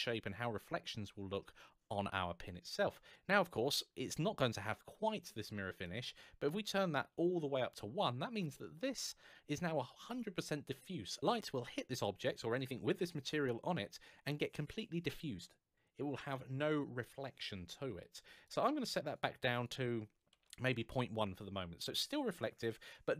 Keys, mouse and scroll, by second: 5.6 click, 7.8 scroll down 1, 8.3 middle click, 18.2 click, 20.3 KP_1, 20.5 Return, 21.4-23.0 scroll up 1.